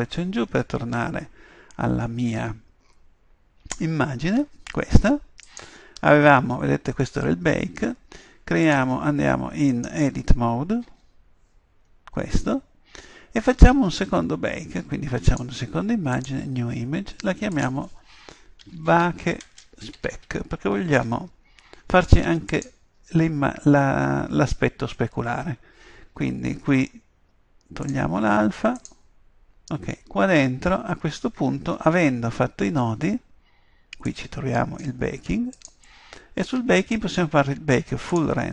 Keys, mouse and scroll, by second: 9.8 right click, 10.9 Tab, 30.8-38.5 middle drag.